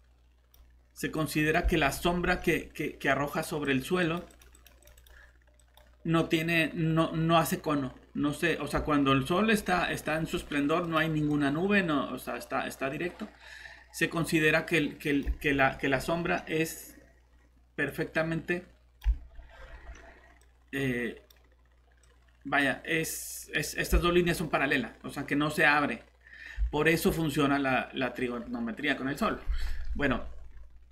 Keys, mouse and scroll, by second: 1.8 scroll up 1, 3.1 click, 8.8 scroll down 1, 9.2 scroll up 1, 9.4 scroll down 1, 10.0 scroll up 1, 10.3 typing, 10.8 click, 15.4 scroll up 1, 15.8-16.2 typing, 17.9 click, 19.2-19.9 typing, 19.2 scroll up 1, 19.4 scroll down 1, 20.4 click, 23.7 scroll up 1, 29.8 scroll down 1, 30.4 typing.